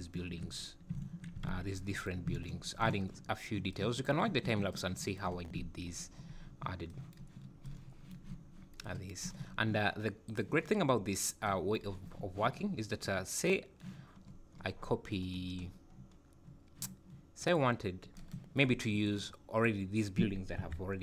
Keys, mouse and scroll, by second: 10.9-11.5 scroll down 3.